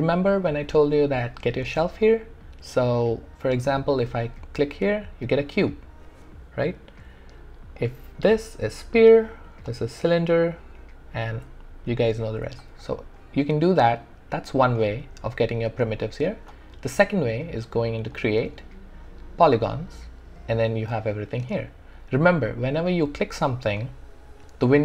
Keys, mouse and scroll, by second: 4.0 click, 6.6 typing, 7.8 click, 18.1 click, 23.8 click, 23.8 typing.